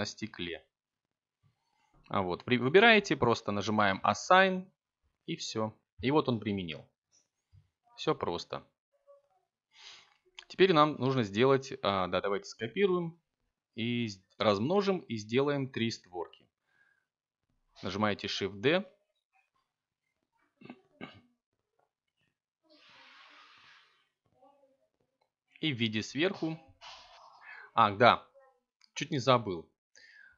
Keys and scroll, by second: 2.6 a, 9.2 7, 16.0 y, 23.9 x.